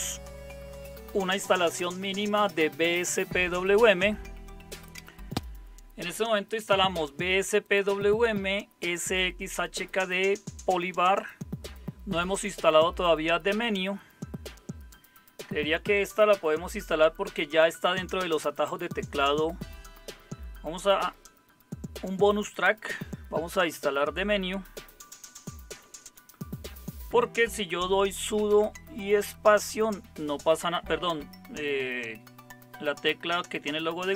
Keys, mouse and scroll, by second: 25.9 super+0, 28.3 super+space.